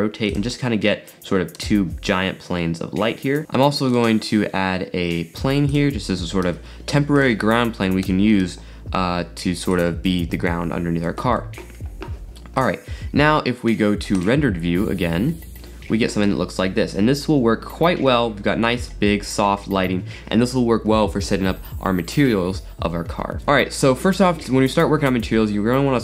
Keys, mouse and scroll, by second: 0.6-3.5 middle drag, 3.5 shift+a, 4.0 shift+a, 6.6 s, 8.2 g, 12.6 click, 14.2 click, 16.7 shift+middle click, 17.2 scroll up 3, 17.7 scroll up 2, 18.1-19.3 shift+middle drag, 19.3 scroll up 2.